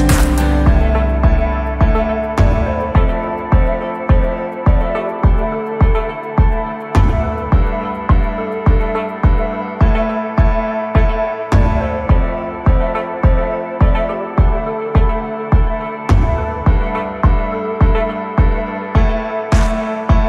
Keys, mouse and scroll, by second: 0.0 ctrl+z, 4.6-6.7 drag, 8.4 scroll down 2, 14.3 KP_1, 16.1-17.4 drag.